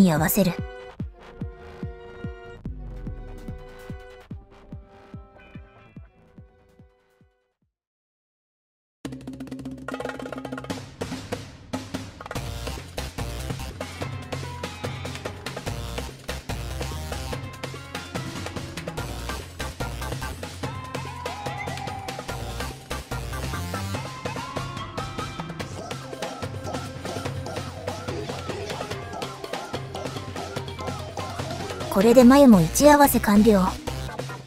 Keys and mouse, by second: 6.6 click, 7.8 Delete, 8.4 click, 8.6-15.0 drag, 16.7-18.1 drag, 25.0 shift+click, 29.2 shift+s, 29.9 shift+s.